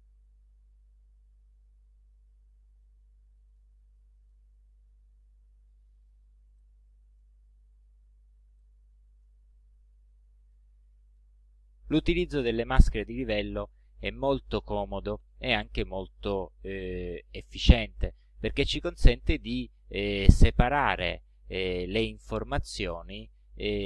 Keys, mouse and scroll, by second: 0.6 ctrl+shift+a, 1.4 ctrl+shift+scroll up 3, 2.4 ctrl+scroll down 2, 3.1 ctrl+middle click, 4.1 ctrl+middle click, 4.8-5.1 ctrl+scroll up 2, 5.5 ctrl+scroll up 2, 6.0 ctrl+scroll down 1, 6.7 ctrl+middle click, 8.7 ctrl+middle click, 9.6-9.9 ctrl+scroll down 1, 10.7 ctrl+click, 18.1 click, 19.5 ctrl+scroll down 2.